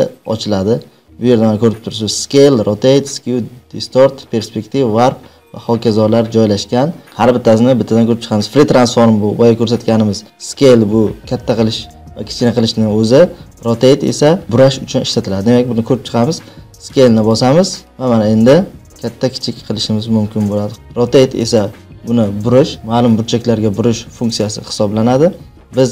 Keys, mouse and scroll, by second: 17.2-18.8 drag.